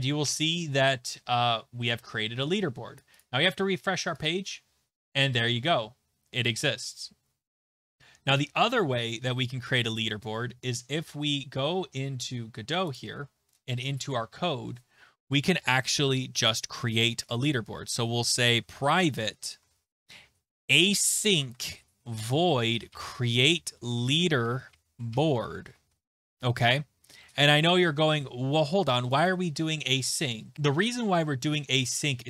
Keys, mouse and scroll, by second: 3.0 click, 3.2 click, 4.2 click, 8.5 click, 13.0 click, 17.4 Return, 17.4 Return, 18.2-27.6 typing, 29.1 click, 29.3 click, 31.5 click.